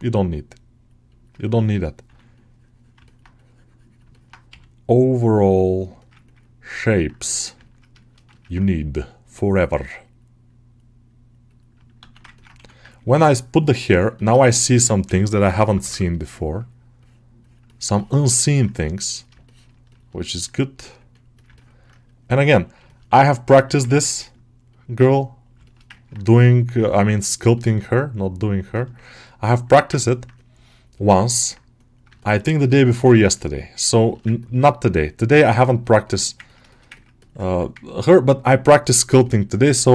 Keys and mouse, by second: 0.9 middle click, 1.6 alt+middle click, 2.9 middle click, 4.0 middle click, 4.4 g, 5.5 click, 5.9 ctrl+alt+middle click, 6.7 alt+middle click, 7.5 ctrl+alt+middle click, 7.9 shift+middle click, 8.2 ctrl+alt+middle click, 9.5 right click, 10.3-11.8 right drag, 11.8 alt+q, 12.2 ctrl+middle click, 12.4 1, 14.0 ctrl+middle click, 14.3 alt+shift+middle click, 14.6 middle click, 14.9 g, 15.4 [, 16.0-17.7 middle drag, 17.8 shift+middle click, 18.3 middle click, 19.3 shift+middle click, 19.8 shift+middle click, 20.1 middle click, 20.7 click, 21.4 ctrl+alt+middle click, 21.9 click, 22.1 click, 22.7 shift+middle click, 23.1 ctrl+middle click, 23.8 ctrl+middle click, 24.0 alt+middle click, 25.5 alt+shift+middle click, 25.8 ctrl+alt+middle click, 26.5-28.6 drag, 28.6 middle click, 29.1 click, 29.6 alt+middle click, 29.9 ctrl+alt+middle click, 30.2-31.3 middle drag, 32.0 shift+middle click, 32.3 alt+middle click, 32.5 ctrl+middle click, 32.8 alt+middle click, 33.4 right click, 34.1 alt+middle click, 34.3 ctrl+middle click, 34.5 alt+middle click, 34.8-36.1 right drag, 36.1 middle click, 36.3 ctrl+middle click, 37.7 ctrl+click, 39.8-39.9 drag.